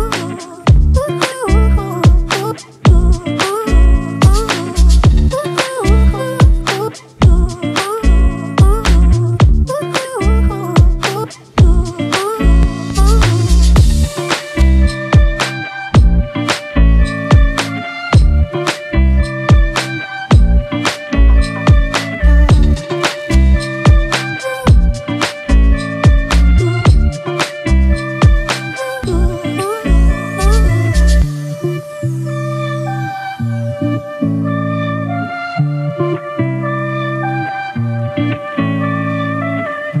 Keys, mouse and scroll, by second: 16.1 shift+click, 16.7 right click, 21.1 right click, 24.0 ctrl+=, 24.2 ctrl+=, 24.4 ctrl+=, 24.5 ctrl+=, 25.1 space, 27.2 ctrl+=, 27.3 ctrl+=, 27.7 space, 28.8-31.3 typing, 33.1 typing, 34.3-36.0 typing, 37.9 typing, 39.1-40.0 typing.